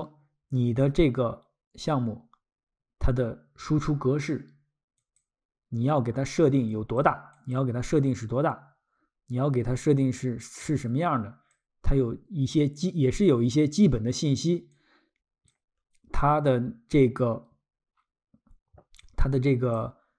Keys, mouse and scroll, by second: 5.0 click, 6.7 click, 7.3 click, 14.7 click, 19.0 click.